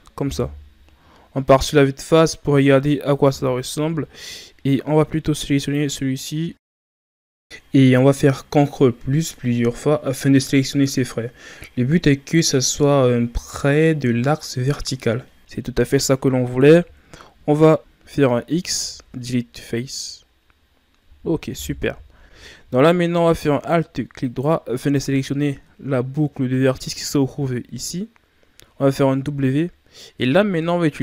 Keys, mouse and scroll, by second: 0.3 KP_1, 3.6 KP_3, 5.6 right click, 7.6 right click, 8.6 ctrl+KP_Add, 9.1 ctrl+KP_Add, 10.0 KP_1, 12.9 scroll up 2, 15.4-17.7 middle drag, 17.7 KP_3, 17.9 w, 18.9 x, 19.0 x, 20.2-20.8 scroll up 4, 20.8-21.3 scroll down 2, 21.6 KP_1, 22.9-24.2 middle drag, 24.2 alt+right click, 25.0-28.0 middle drag, 29.2 w.